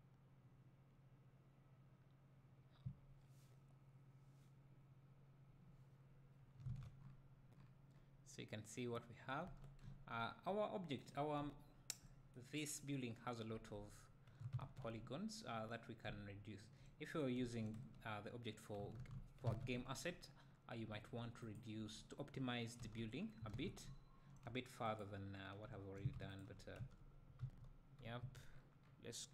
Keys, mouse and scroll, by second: 1.0 right click, 2.0 right click, 2.7 right click, 4.5 right click, 6.7 alt+a, 9.2 scroll down 2, 9.6 Tab, 9.8 `, 10.3 scroll up 2, 11.1 click, 11.4 right drag, 11.4 `, 13.7 Tab, 14.6 alt+a, 15.0 `, 17.0-17.4 scroll down 1, 17.4 `, 17.8 Tab, 19.7 `, 20.4-20.9 scroll up 1, 20.9 `, 21.5 click, 21.8 Tab, 23.2-23.8 scroll down 1, 23.8 `, 25.0 click, 25.7 `, 26.4 shift+click, 26.8 Tab, 27.4 a, 28.5 scroll down 1.